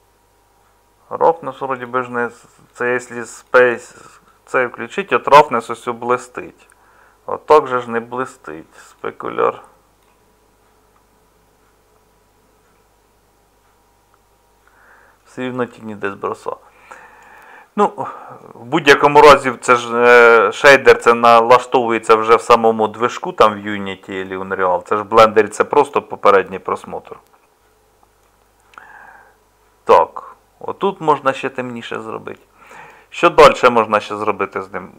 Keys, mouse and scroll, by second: 19.7-22.9 middle drag, 23.5-30.8 middle drag.